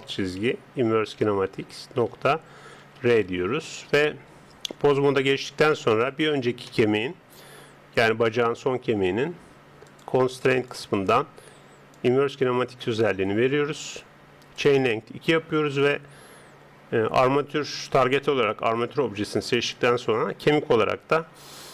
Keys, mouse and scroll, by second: 4.7 Tab, 6.1 right click, 6.7-9.9 middle drag, 9.9-12.4 drag.